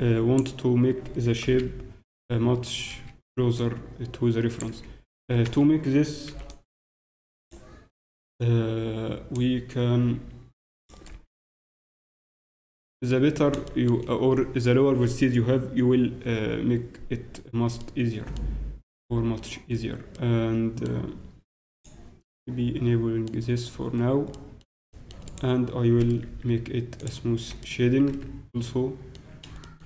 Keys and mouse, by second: 1.4 g, 3.6-5.3 drag, 4.7 z, 5.1 z, 5.4 a, 6.3 b, 8.3-10.1 drag, 10.1 r, 11.1 z, 11.6 Tab, 13.3 middle click, 14.6 middle click, 17.8-19.7 middle drag, 20.1-22.5 middle drag, 22.5 click, 23.3-25.2 middle drag, 23.4 click, 25.2-27.4 right drag, 27.0-28.8 drag, 27.4 t, 28.8 middle click, 29.6-29.8 middle drag.